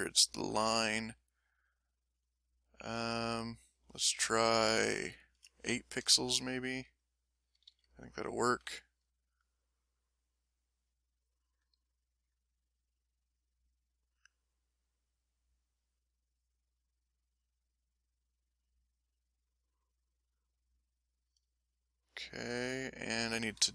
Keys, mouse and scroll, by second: 1.5-3.5 drag, 4.0-5.3 shift+drag, 6.4 shift+click, 7.6 ctrl+z, 7.9 middle click, 8.7 ctrl+middle click, 10.8-13.8 drag, 16.1-19.3 drag, 20.2-21.5 middle drag, 21.6 ctrl+middle click, 22.4 ctrl+middle click.